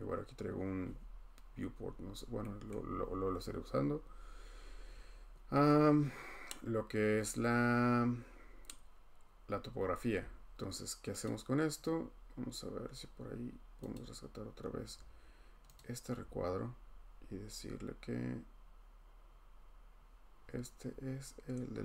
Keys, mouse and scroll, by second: 2.7 scroll, 3.4-3.7 scroll, 4.8-5.1 scroll, 11.2 click, 13.9 click, 14.6-15.0 scroll, 15.8 click, 16.1 scroll, 20.4-20.9 scroll.